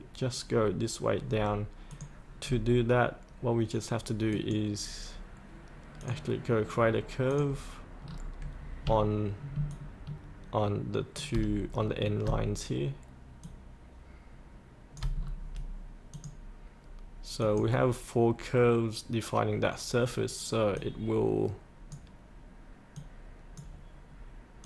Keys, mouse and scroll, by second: 1.9 click, 2.5 scroll up 1, 4.3 click, 8.0 scroll down 1, 9.7-11.2 shift+drag, 11.7 scroll down 1, 13.4-15.0 shift+drag, 15.2-16.1 scroll up 1, 16.1 click, 20.9-24.0 drag.